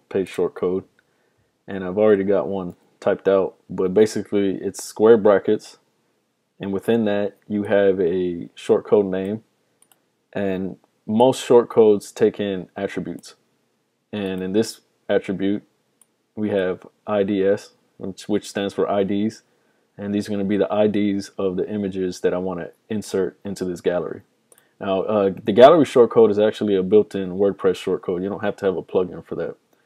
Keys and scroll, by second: 2.8 super+v.